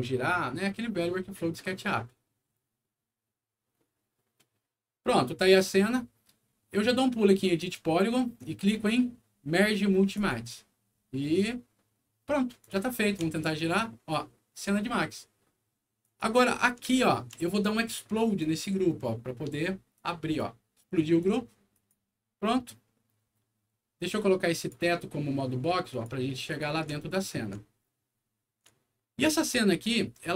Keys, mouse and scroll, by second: 7.3 click, 10.1 click, 12.5 click, 13.3-14.5 alt+middle drag, 14.9 alt+middle click, 15.9 alt+click, 16.9 alt+middle click, 18.3 alt+click, 19.9 alt+click, 21.1 click, 21.7 click, 24.5 click, 25.8 click, 26.4 click, 27.0 alt+middle click, 27.7 alt+middle click, 28.3 scroll up 1, 28.7 alt+middle click.